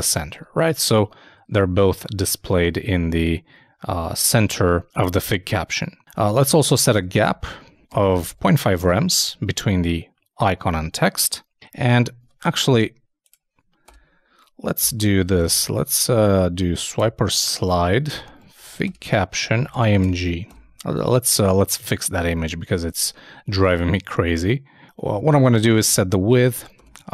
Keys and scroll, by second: 0.0 super+Tab, 9.2 super+;, 9.2 super+s, 9.5 super+Tab, 20.2 shift+[, 20.5 shift+Return, 25.4-26.4 typing.